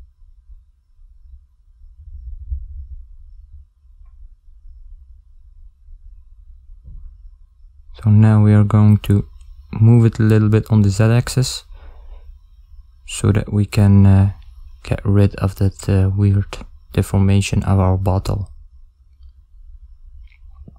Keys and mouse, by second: 5.1 Tab, 7.2 click, 12.1 click, 14.8 middle click.